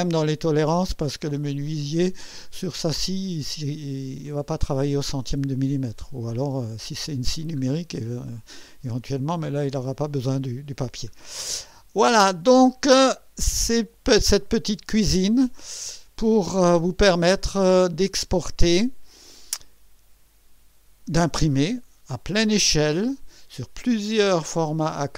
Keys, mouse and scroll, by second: 3.0-3.7 ctrl+scroll down 2, 4.3 ctrl+middle click, 5.3-5.9 ctrl+scroll down 4, 6.3 ctrl+scroll down 2, 6.7-7.7 ctrl+middle drag, 8.0-9.1 ctrl+middle drag, 9.4 ctrl+scroll down 2, 10.2 ctrl+middle click, 11.4 ctrl+scroll up 2, 12.3 ctrl+middle click, 13.1 ctrl+scroll down 2, 19.2 click.